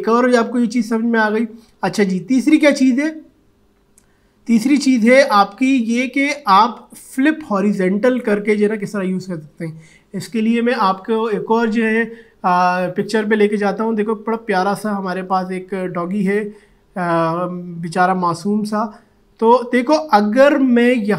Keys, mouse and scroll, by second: 12.8 click, 16.3 click.